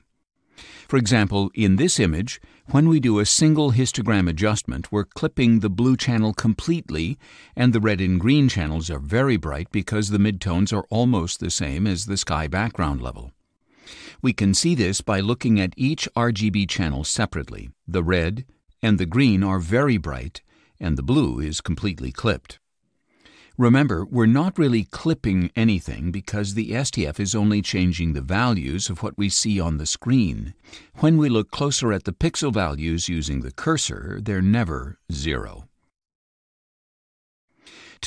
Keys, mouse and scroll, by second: 16.3 click, 17.9 click, 18.9 scroll down 2, 21.2 scroll down 2, 30.9-37.9 drag.